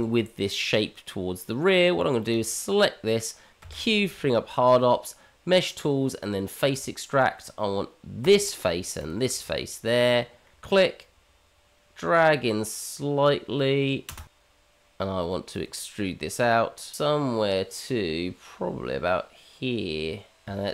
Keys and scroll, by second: 3.6 q.